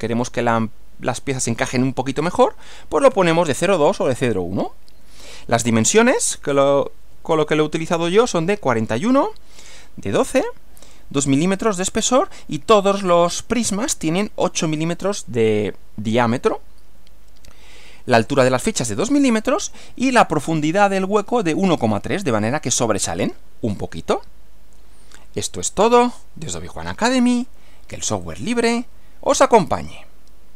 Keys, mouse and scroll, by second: 5.8 Right, 28.3 click, 29.8 click.